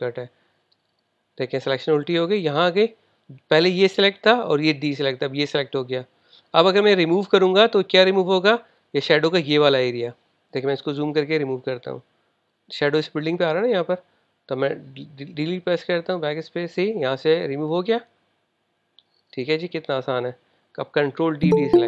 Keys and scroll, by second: 21.7 super+d.